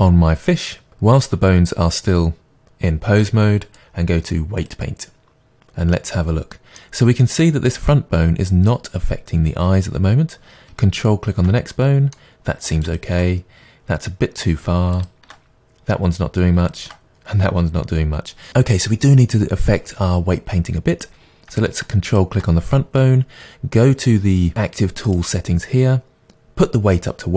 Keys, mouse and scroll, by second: 3.6-6.0 drag, 6.0-11.0 middle drag, 11.0 ctrl+click, 11.7-12.8 middle drag, 12.8 ctrl+click, 15.0-16.5 ctrl+drag, 16.7-19.0 ctrl+drag, 22.1-24.5 ctrl+drag, 25.1-26.8 drag.